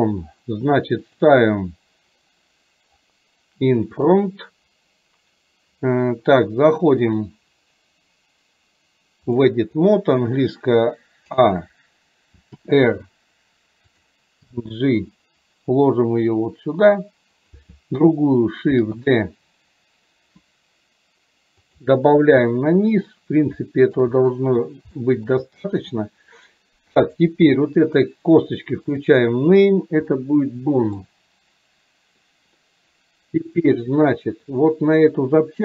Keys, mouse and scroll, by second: 1.2 drag, 7.2-9.6 drag, 18.9 shift+d, 23.9 shift+middle click, 25.0 shift+middle click, 30.2 shift+middle click.